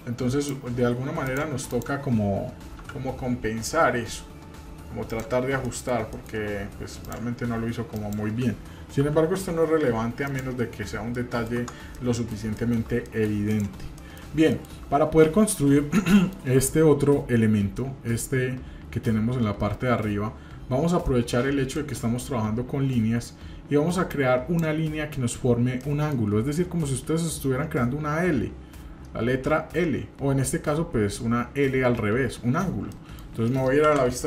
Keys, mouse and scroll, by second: 0.0 click, 1.2 click, 1.7 click, 2.8 g, 5.7 shift+middle click, 7.0 click, 8.0 click, 9.0 g, 10.9 scroll down 1, 11.1 middle click, 11.6 Tab, 11.9-12.3 middle drag, 12.6 shift+middle click, 13.1 middle click, 13.5 click, 14.0 middle click, 14.5 shift+middle click, 16.2 shift+middle drag, 21.7 middle click, 24.1 click, 25.3 scroll down 2, 25.8-26.3 shift+middle drag, 32.9 middle click, 33.8 KP_7.